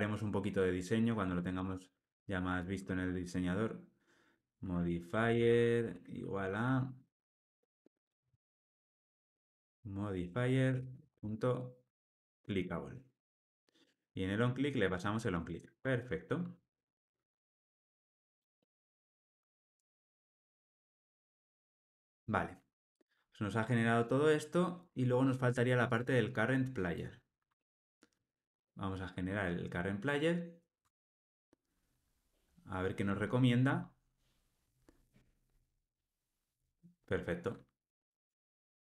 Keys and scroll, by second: 1.6 Return, 2.3 super+z, 12.3 Escape, 13.8 Tab, 15.3 alt+Return, 17.3 alt+super+l, 19.8 alt+Return, 21.0 alt+super+l, 21.3 ctrl+alt+o, 28.2 alt+Return, 33.1 Return, 38.1 Tab.